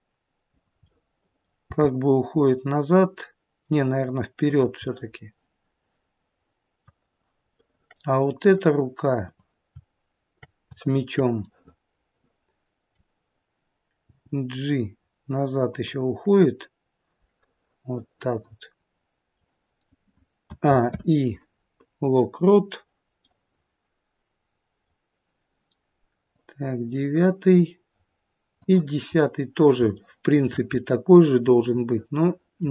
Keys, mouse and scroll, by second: 0.7 middle click, 0.7-1.7 scroll up 1, 1.7 g, 4.8 middle click, 7.6 middle click, 9.2 click, 10.8 shift+click, 11.4 middle click, 14.4 g, 17.2 middle click, 20.4 a, 20.9 i, 23.2 middle click, 29.2-29.9 scroll down 1, 29.9 shift+middle click, 30.7 middle click.